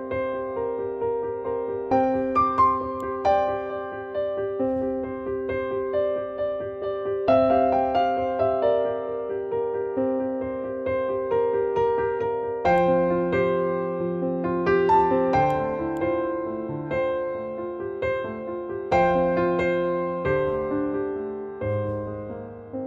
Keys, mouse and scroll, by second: 0.7-1.8 typing, 2.9-8.5 drag, 12.7-15.4 drag, 20.9-21.3 typing, 22.4 typing.